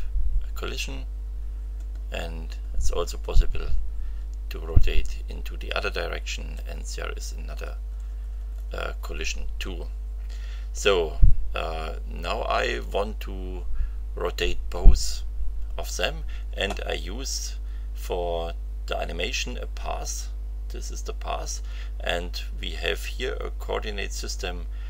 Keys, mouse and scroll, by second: 1.1-3.7 scroll up 6, 4.3-5.1 scroll up 4, 5.3 scroll up 2, 6.2-6.5 scroll up 2, 6.8-7.2 scroll up 2, 7.4-9.1 scroll down 4, 22.6 scroll down 1.